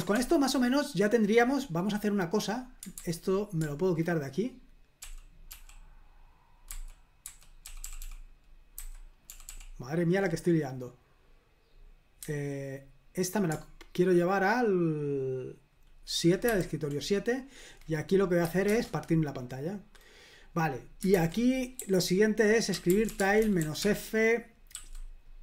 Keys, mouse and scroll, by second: 0.2 ctrl+l, 2.9 super+h, 5.0 super+l, 5.5 super+l, 6.7 super+h, 16.5 super+/, 18.7 super+Return, 21.1 super+h, 21.8-25.4 typing.